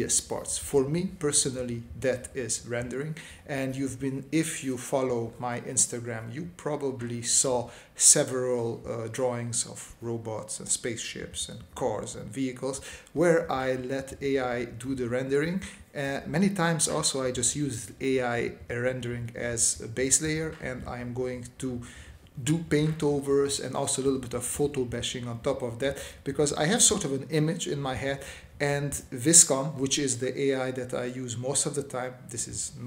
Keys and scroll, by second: 0.9 space, 2.4 space, 4.7 space, 6.7 space, 8.8 space, 10.0 space, 11.4 space, 17.6 space, 22.6 s, 24.5 s, 25.5 space, 31.3 space, 32.2 space.